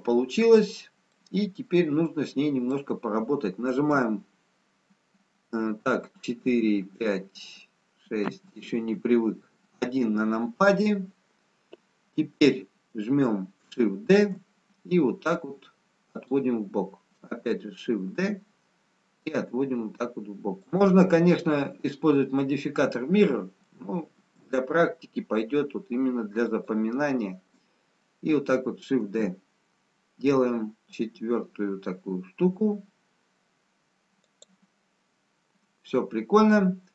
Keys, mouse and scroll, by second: 1.9-2.7 scroll down 3, 2.7 middle click, 3.9 KP_3, 5.7 KP_4, 7.2 KP_5, 7.2 KP_6, 8.2 KP_2, 9.4 KP_1, 14.2 shift+d, 18.1 shift+d, 24.1 shift+d.